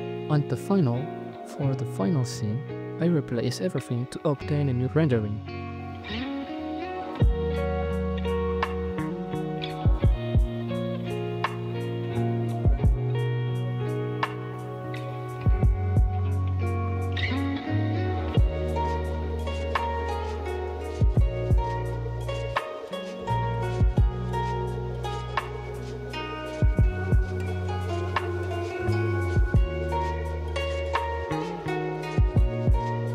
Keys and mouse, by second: 0.1 g, 1.2 right click, 1.3 s, 2.0 r, 2.5 r, 3.9-9.3 typing, 13.7 middle click, 18.0 r, 18.0 z, 18.9 z, 24.0 r, 24.5 g, 27.5 r, 27.5 z, 31.4 KP_7.